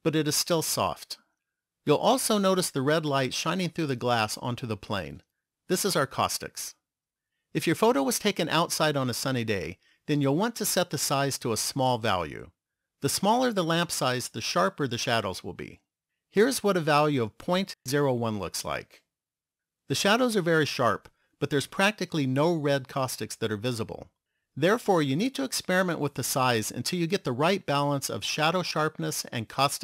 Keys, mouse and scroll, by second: 16.7 click.